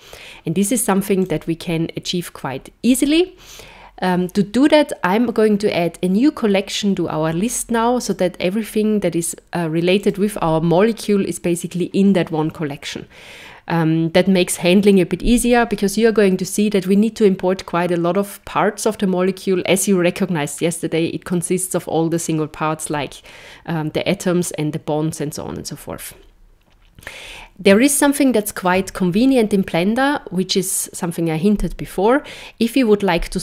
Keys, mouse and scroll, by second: 1.2 click, 8.0 click, 9.9 click, 27.9 shift+middle click.